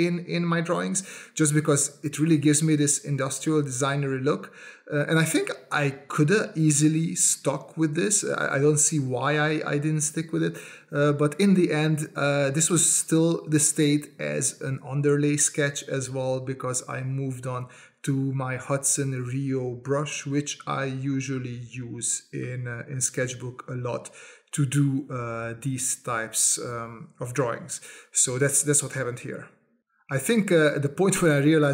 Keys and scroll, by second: 0.0-2.0 typing, 3.4 space, 4.4 space, 5.5 space, 5.9 s, 6.3 space, 7.2 space, 8.3 space, 10.5 space, 12.7 space, 13.1 space.